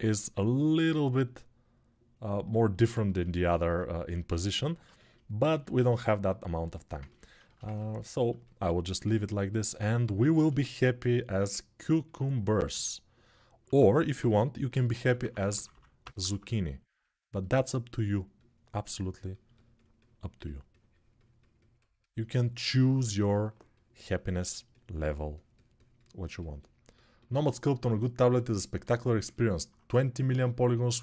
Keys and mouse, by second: 8.8 alt+q, 10.0 shift+r, 12.8 ctrl+r, 13.4 1, 14.0-14.8 [, 14.9 [, 15.3 [, 19.1-31.0 drag.